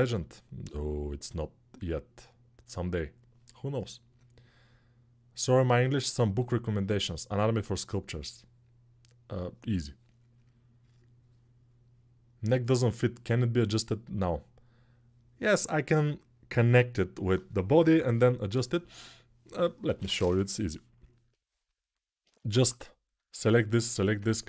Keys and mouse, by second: 22.6 ctrl+Tab, 23.0-24.4 right drag.